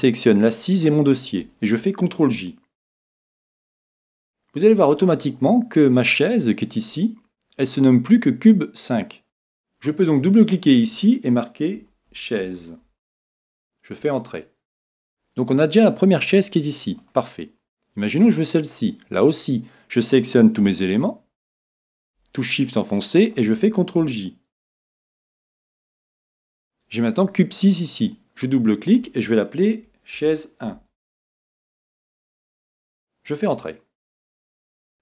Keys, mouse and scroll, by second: 0.3 right click, 3.6 ctrl+j, 5.3-7.2 middle drag, 16.2-18.2 middle drag, 18.0 right click, 18.7-20.5 middle drag, 20.9 right click, 23.3-24.6 middle drag, 24.7 middle click, 24.9 ctrl+j, 28.0-30.4 drag, 34.9-35.0 drag.